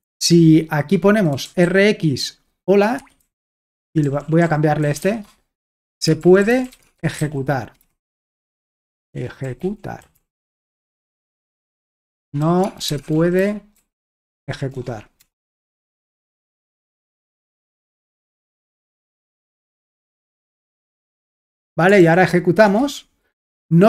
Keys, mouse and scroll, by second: 0.2 alt+Tab, 1.1-2.1 typing, 3.0 Escape, 3.2-11.1 typing, 12.2-16.3 typing, 17.8-23.2 typing.